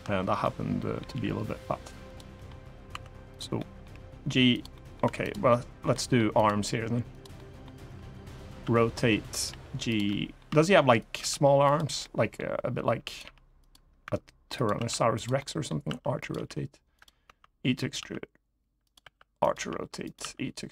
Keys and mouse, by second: 0.1 middle click, 0.8 g, 1.8 click, 2.1 middle click, 2.6 2, 3.3 middle click, 3.6 g, 4.2 click, 4.4 middle click, 4.8 3, 5.6 middle click, 6.1 click, 7.1 middle click, 7.5-10.9 typing, 9.1 click, 9.6 click, 9.8 middle click, 10.7 click, 11.4 click, 11.7 middle click, 12.8 click, 12.8 r, 12.9 g, 13.3 click, 13.8 e, 14.3 click, 14.5 s, 14.9 click, 15.1 middle click, 15.6 r, 15.9 click, 16.1 g, 16.7 click, 17.0 e, 17.5 click, 17.7 s, 18.6 click, 18.7 r, 19.1 click, 19.2 g, 19.8 click, 19.9 e, 20.6 click.